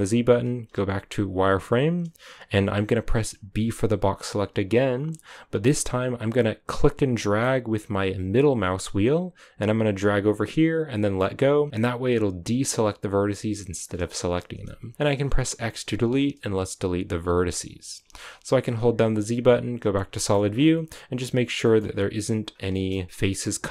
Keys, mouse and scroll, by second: 0.6 z, 13.9-15.4 scroll down 4, 16.6 x, 19.8 z, 20.1 shift+middle click, 20.4-21.6 scroll up 7, 21.6 shift+middle click, 21.8-22.4 scroll up 4, 22.4 scroll down 3, 22.6 shift+middle click, 22.8-23.6 scroll up 2, 23.6 scroll down 3.